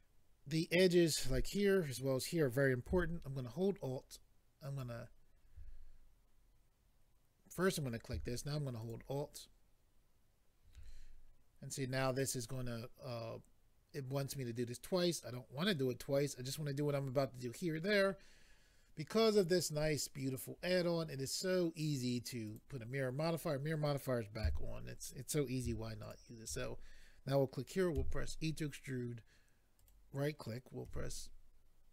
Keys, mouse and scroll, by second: 4.6 alt+click, 7.6 click, 8.8 alt+click, 19.2 click, 22.5 click, 26.0 alt+click, 29.8 right click, 30.8 s.